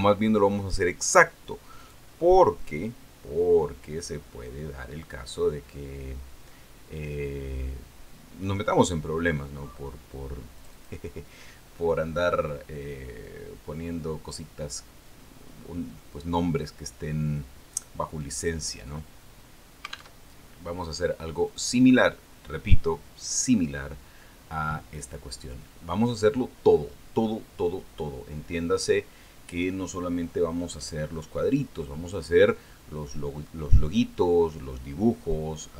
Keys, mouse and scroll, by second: 1.1 click, 3.3 click, 10.4 scroll down 1, 12.1 click, 14.8-15.1 scroll down 1, 15.1-15.5 scroll up 1, 16.6 scroll down 1, 17.9-18.3 scroll down 1, 18.5-18.9 scroll down 2, 19.7 click, 21.6 alt+Tab, 23.0 click, 25.3-26.7 scroll up 3, 26.7-28.0 scroll down 4, 28.2 scroll up 2, 29.3 scroll down 2.